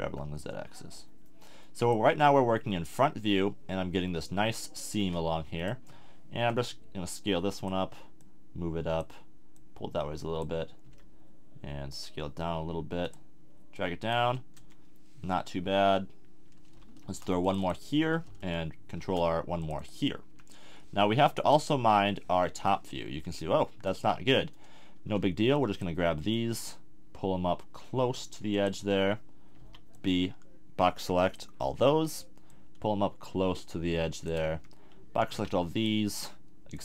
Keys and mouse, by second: 6.5 s, 7.5 click, 10.8 s, 11.4 middle click, 13.1-14.2 drag, 14.6 a, 17.0 ctrl+r, 17.7-19.6 drag, 18.9 ctrl+r, 19.8 click, 20.3 a, 20.7 middle click, 21.5 KP_7, 21.9 middle click, 25.3 b, 26.3-28.6 drag, 28.8 a, 29.6 b, 34.5 a, 35.3 b.